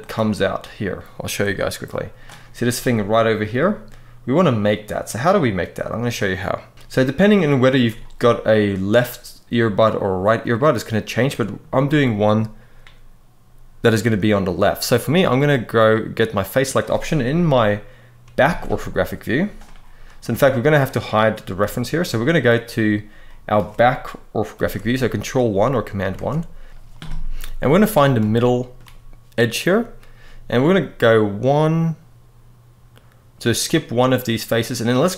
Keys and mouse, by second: 10.2 middle click, 15.6 click, 18.1 ctrl+KP_1, 20.0 Tab, 20.6 click, 21.3 h, 21.8-22.2 middle drag, 23.0 middle drag, 24.3 ctrl+KP_1, 25.8 click, 25.9 Tab, 28.0 shift+middle click.